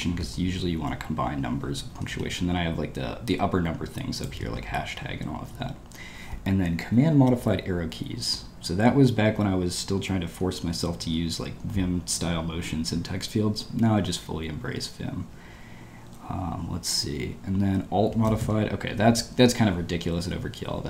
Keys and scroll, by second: 1.9 w, 2.1 w, 5.6-6.4 typing, 13.8 typing, 15.2 typing, 18.2 k, 18.4 k, 20.4 ctrl+d.